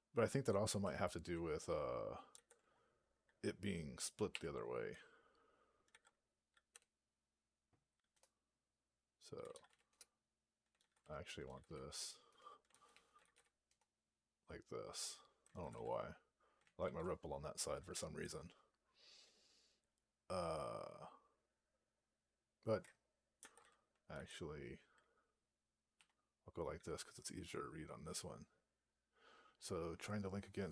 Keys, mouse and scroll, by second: 8.0 Return, 9.8 Return, 12.2 Return, 13.6 Return, 16.5 ctrl+a, 16.7 ctrl+k.